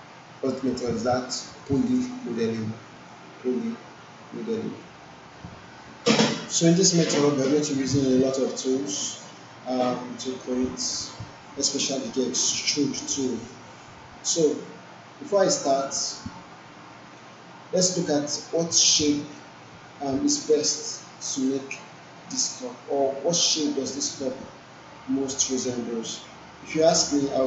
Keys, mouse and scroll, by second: 1.4 alt+right click, 1.7 alt+middle click, 2.6-3.2 alt+middle drag, 6.9 click.